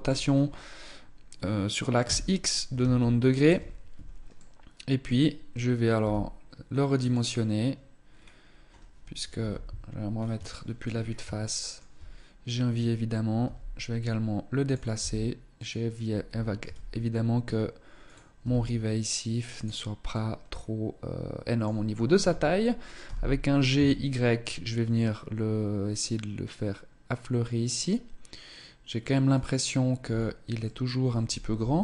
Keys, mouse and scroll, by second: 4.1 middle click, 5.8 s, 7.9 scroll up 3, 9.2 KP_1, 9.9 scroll down 3, 10.3 shift+middle click, 10.5 scroll up 1, 11.0 shift+middle click, 13.2 g, 14.8 s, 16.4 g, 18.2 s, 19.9 middle click, 22.0 z, 22.9 g, 29.2 click, 29.8-30.4 scroll up 3, 30.4 middle click, 31.4 KP_1.